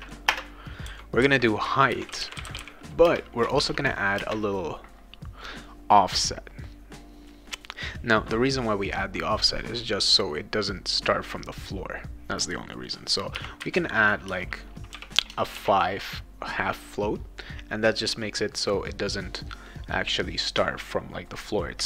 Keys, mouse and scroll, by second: 0.0-3.0 typing, 4.2 space, 13.1-14.9 typing, 15.6 ctrl+s.